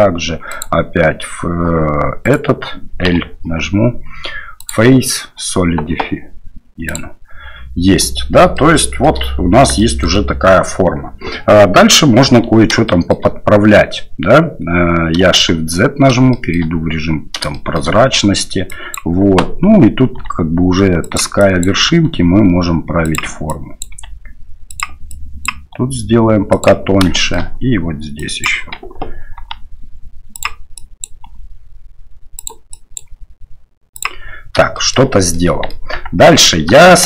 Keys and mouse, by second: 0.6 click, 2.2 right click, 4.6-6.9 drag, 8.5 shift+middle click, 9.7 shift+middle click, 12.9 shift+middle click, 15.4 shift+z, 16.3 shift+click, 17.5 shift+click, 18.7 click, 20.1 g, 21.4 click, 21.8 g, 23.6 click, 23.9 g, 25.1 click, 25.6 g, 27.2 shift+middle click, 28.2 click, 29.4 g, 30.8 click, 31.2 g, 32.8 click, 33.1 g, 34.8 shift+middle click, 35.4 middle click, 35.9 Tab, 36.2 click, 36.8 shift+click.